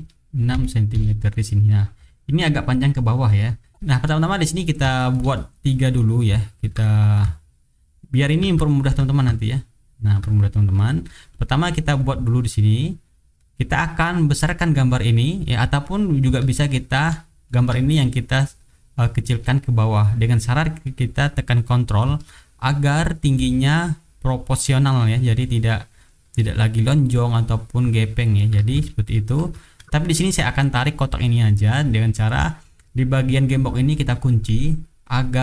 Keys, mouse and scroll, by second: 0.5 KP_6, 0.9 Return, 2.0 click, 3.2 middle click, 4.4 middle click, 4.9 shift+right click, 5.3 shift+click, 5.8 shift+click, 6.6 ctrl+d, 6.8-8.5 ctrl+drag, 8.8 ctrl+d, 9.1-10.2 ctrl+drag, 10.6 ctrl+click, 11.3 click, 11.9 click, 12.4 click, 13.3 middle click, 15.6 click, 16.2-17.6 ctrl+drag, 18.1-21.0 drag, 22.3-28.5 ctrl+drag, 28.9 ctrl+z, 30.2 click, 31.4 click, 34.0 click, 35.0-35.4 drag.